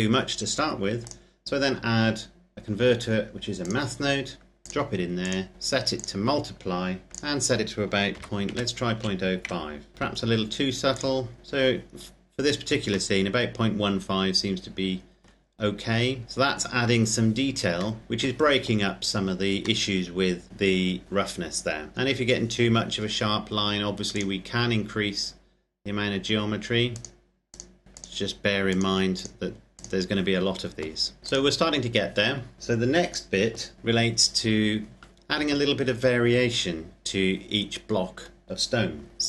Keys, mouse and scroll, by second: 0.8 click, 3.5 click, 7.8 KP_Decimal, 8.2 KP_0, 8.7 KP_5, 9.3 KP_Enter, 10.8 click, 11.4 scroll up 1, 11.7-12.9 scroll down 1, 12.9 middle click, 15.5-16.9 scroll up 1, 17.9 shift+middle click, 19.7 middle click, 20.5-20.8 scroll down 1, 21.9 middle click, 24.1 click, 26.9 click, 31.6-32.5 scroll down 1, 32.5 click, 39.1 scroll down 1.